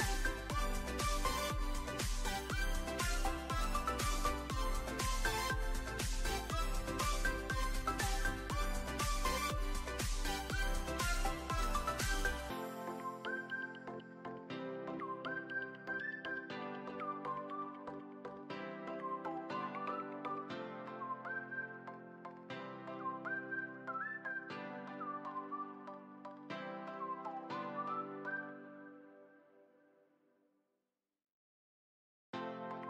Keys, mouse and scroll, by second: 0.3 drag, 1.1 drag, 1.9 click, 2.4 click, 2.9 click, 3.6-5.2 drag, 7.6 click, 8.2 click, 9.0-9.7 drag, 11.9 shift+middle drag, 12.5 alt+middle drag, 13.0-13.3 shift+middle drag, 15.0-17.1 drag, 17.8-19.8 drag, 21.2 click, 21.8 click, 23.5 click, 24.8-26.2 drag, 26.8-28.8 drag, 28.8 alt+middle click, 29.5 shift+middle click, 30.2-31.8 drag, 32.1-32.8 drag.